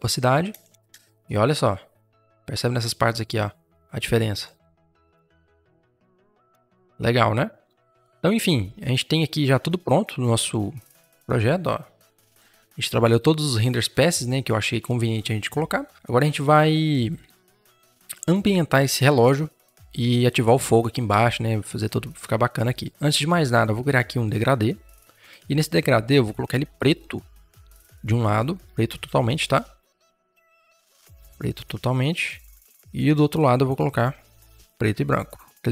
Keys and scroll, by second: 0.4 Return, 2.6 space, 29.4 ctrl+z.